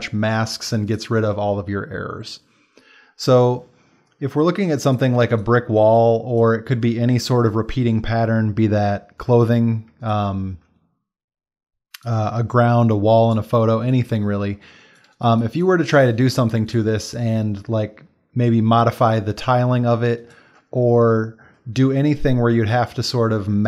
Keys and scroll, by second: 0.7 ctrl+space, 1.6 space, 9.3 space, 16.5 ctrl+space, 20.0 space.